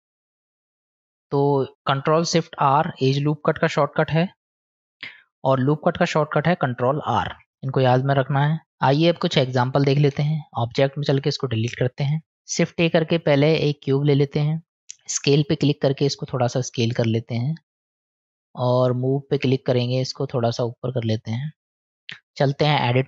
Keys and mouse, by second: 1.1-2.6 middle drag, 4.6 click, 5.8-6.8 drag, 8.0 middle click, 10.1 Tab, 12.0 Delete, 12.6 shift+a, 15.6 click, 17.3-18.4 drag, 18.9 click, 20.3 click, 21.1 click, 21.7 click, 22.3 click.